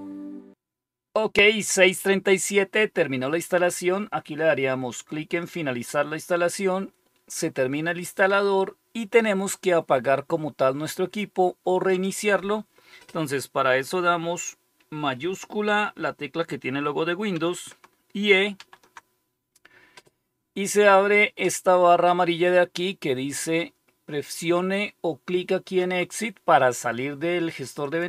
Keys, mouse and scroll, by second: 0.0 Return, 5.3 click, 11.8 click, 18.5 super+e, 27.7 click.